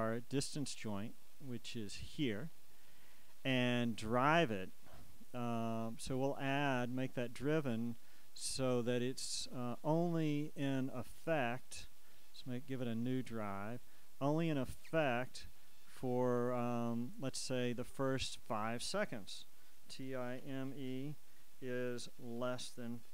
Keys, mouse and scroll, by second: 0.6-3.1 drag, 7.3 click, 9.5 click, 11.2 click, 14.0 click, 16.7 click, 18.4 click, 19.9 shift+t, 20.1 shift+i, 20.5 shift+m, 20.8 shift+e, 22.5 shift+,.